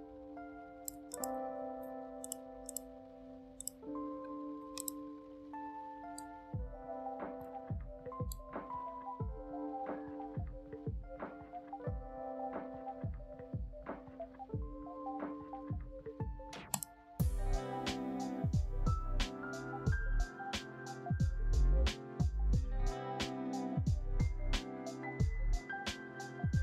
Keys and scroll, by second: 1.5 ctrl+shift+a.